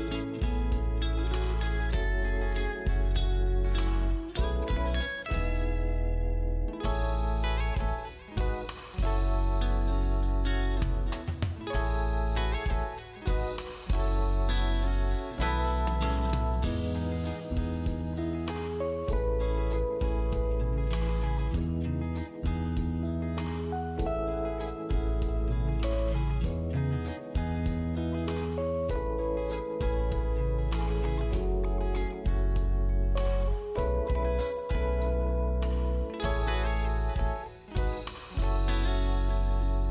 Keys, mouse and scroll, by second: 1.9 shift+click, 3.3 scroll up 1, 3.7 click, 5.9-6.6 scroll down 1, 6.6 click, 6.8 scroll up 1, 7.0 click, 7.6 ctrl+z, 7.8 click, 8.1 right click, 8.5 shift+click, 8.9 click, 9.4 scroll down 1, 9.6 click, 9.7 scroll up 1, 9.9 click, 10.7 right click, 10.8-11.2 scroll up 1, 11.2 click, 11.9 right click, 12.2 click, 12.3 scroll up 1, 12.4 click, 14.2-15.1 scroll up 1, 15.1 click, 15.4 right click, 16.1 click, 23.4 right click, 23.9 click, 26.1-26.5 scroll up 1, 26.5 click, 27.1-28.0 scroll down 1, 28.0-28.5 scroll up 1, 28.5 click, 32.9 right click, 33.0 scroll down 1, 33.2 scroll up 1, 33.4 click, 34.2 scroll up 1, 34.4 click, 35.2 click, 35.5 scroll down 1, 35.7 click, 35.9 scroll up 1, 36.2 click, 36.3 right click, 36.5 click, 38.8 scroll down 1, 38.9 click, 39.1-39.7 scroll up 2, 39.3 click, 39.4 right click, 39.7 click.